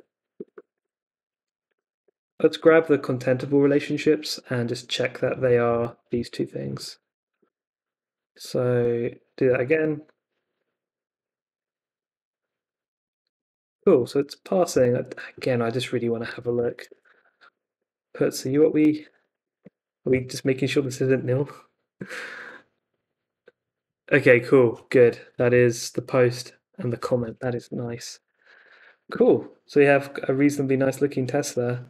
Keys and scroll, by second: 0.0-2.5 typing, 2.6 super+s, 5.4 x, 5.7 Left, 5.8 x, 7.1 Left, 7.2 x, 7.4 super+s, 8.3 super+Tab, 9.4 Up, 9.7 Return, 14.0 super+Tab, 16.2 super+c, 16.4-19.5 typing, 19.6 super+Tab, 19.7 Up, 20.0 Return, 27.5 super+Tab, 27.8 Escape, 28.5 shift+v, 28.6 Up, 28.8 d, 29.0 super+s.